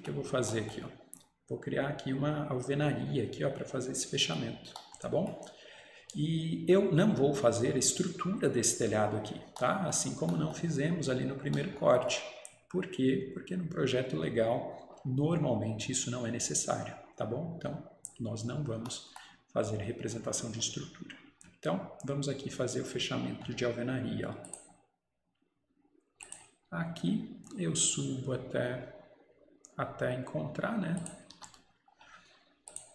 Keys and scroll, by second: 31.4 Escape.